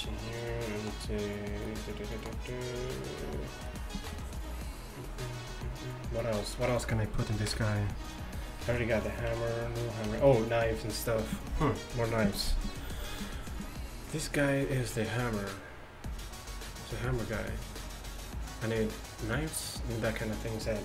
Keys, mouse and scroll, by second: 2.1 middle click, 3.9-5.9 middle drag, 7.5 KP_1, 8.7 z, 9.4 z.